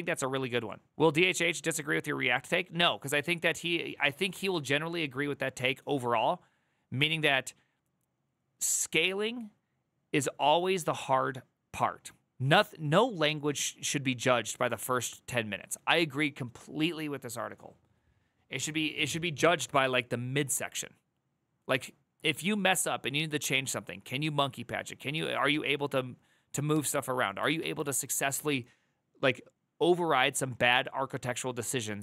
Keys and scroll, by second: 4.0 alt+[, 26.4 alt+[.